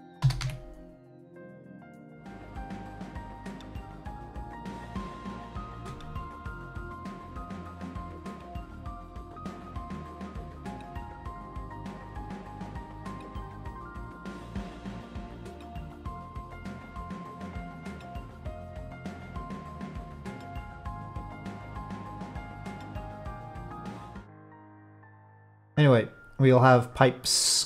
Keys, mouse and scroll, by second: 0.2 s, 2.3-3.9 drag, 5.2-5.7 middle drag, 5.7 Tab, 6.5 middle click, 8.9 click, 10.4-12.8 drag, 13.3-15.0 drag, 16.0-18.5 drag, 19.1-20.7 drag, 21.3-23.5 drag, 23.9-25.5 middle drag, 27.2 middle click.